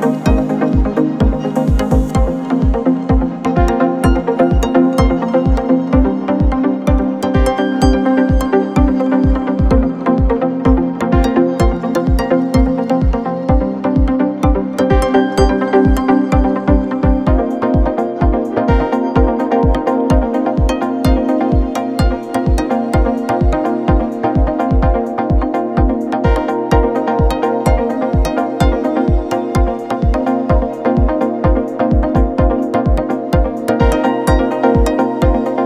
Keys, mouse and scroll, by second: 1.1 shift+click, 5.2-6.5 alt+scroll down 1, 7.4-8.1 alt+scroll up 1, 8.1-10.7 drag, 10.7 alt+shift+scroll down 1, 12.4-13.0 alt+shift+scroll up 1, 13.0 shift+click, 17.1 shift+click, 21.9 ctrl+g, 23.6-25.1 drag, 25.8 shift+c, 26.4 shift+p, 26.9 space, 28.3 shift+t, 30.6 Return, 32.0 click, 34.5 shift+click.